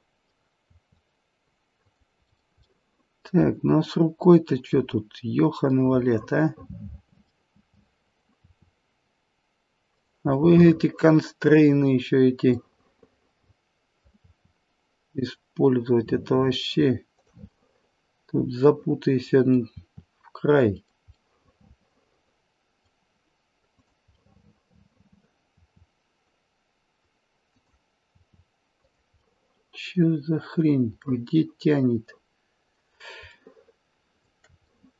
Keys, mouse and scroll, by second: 0.7 r, 2.3 middle click, 2.3 scroll up 1, 2.6 middle click, 4.2-5.7 scroll up 6, 4.7 middle click, 5.7 middle click, 5.7-7.2 scroll up 1, 7.2 middle click, 8.3 r, 10.4 middle click, 11.7-12.6 scroll down 1, 12.6 middle click, 14.2 r, 17.5 middle click, 19.8 r, 24.3 middle click, 25.5 r, 28.1 r, 29.1 middle click, 29.5 middle click, 30.7 scroll down 2, 31.0 middle click, 33.4 shift+middle click, 33.7 shift+middle click, 34.6 middle click.